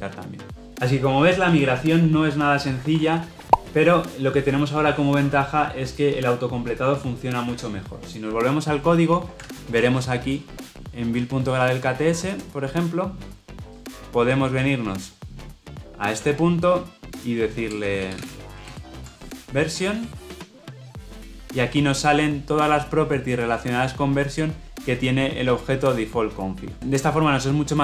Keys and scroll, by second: 20.5 ctrl+space.